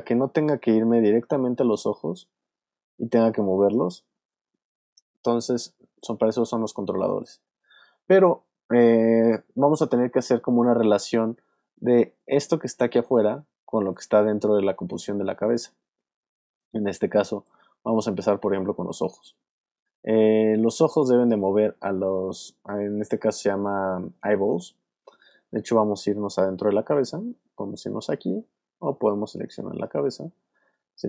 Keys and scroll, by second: 4.1 super+z, 4.9 alt+super+z, 5.6 alt+space, 6.8 alt+space, 7.7 space, 10.3 space.